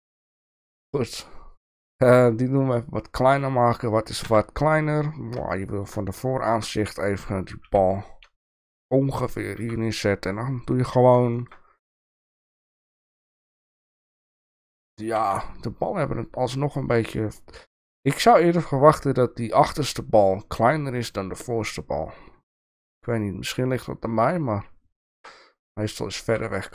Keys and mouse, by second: 1.7 s, 4.2 KP_1, 5.5-5.9 shift+middle drag, 6.4-6.7 middle drag, 7.8 g, 9.6 s, 11.3 shift+middle click, 12.1 shift+middle click, 13.2 g, 15.2 s, 25.0 shift+middle click, 26.3 s.